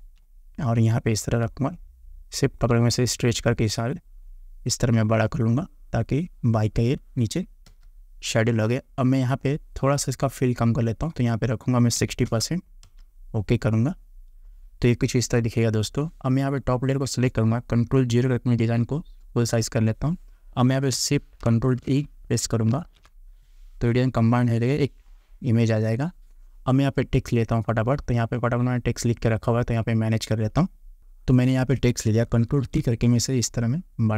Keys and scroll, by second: 7.7 Return, 12.0 6, 12.3 0, 12.9 Return, 18.6 ctrl+0, 22.8 ctrl+alt+shift+e, 32.5 ctrl+t.